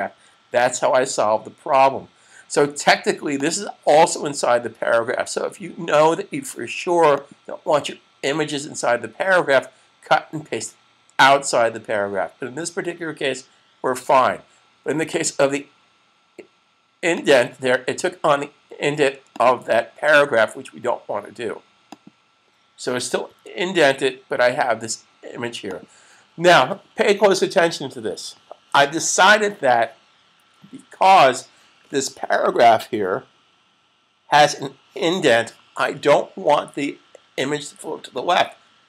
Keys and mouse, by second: 0.0 super+s, 3.2 click, 6.9 click, 14.9 click, 21.7 click, 23.0 super+s, 38.0 click.